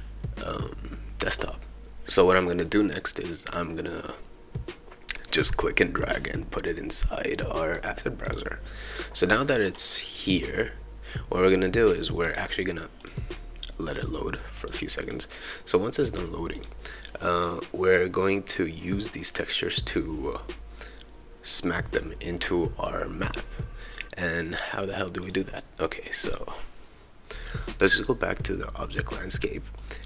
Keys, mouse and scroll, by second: 5.8-7.7 drag, 8.3 click, 9.4 click, 12.2 click, 13.0 click, 13.9 click, 14.6 click, 15.0 click, 15.4 click, 16.6 click, 24.0 click, 25.2 click, 26.2 click, 28.0 click, 29.8 click.